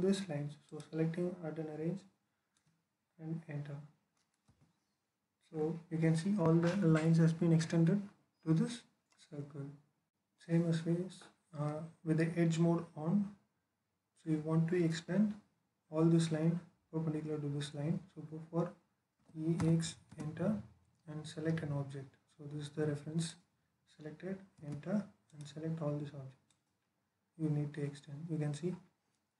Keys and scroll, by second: 4.4 space, 19.0-19.4 typing, 19.9 alt+space, 24.4 space.